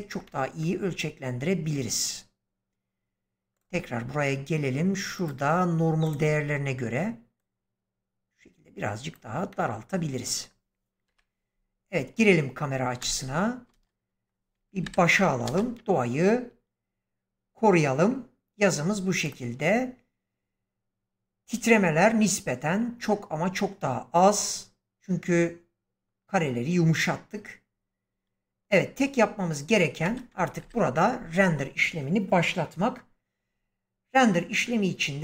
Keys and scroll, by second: 11.0 0, 12.9 space, 14.7 shift+Left, 15.4 space, 29.9 space, 30.5 shift+Left.